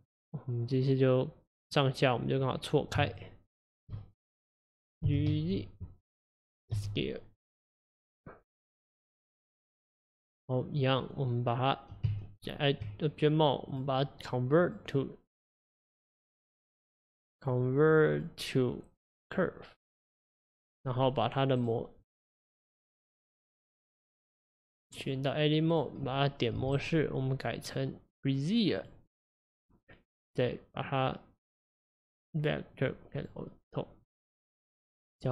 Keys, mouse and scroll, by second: 0.1 click, 0.7-2.5 middle drag, 2.5 click, 3.1 shift+click, 3.8 shift+click, 4.0-5.1 middle drag, 5.1 g, 6.8 s, 10.9 click, 12.1 Tab, 13.7-15.9 drag, 16.5 click, 17.4-20.1 drag, 20.8 drag, 21.3 click, 21.6 right click, 22.5 click, 25.0-26.6 drag, 26.6 a, 26.8-32.4 right drag.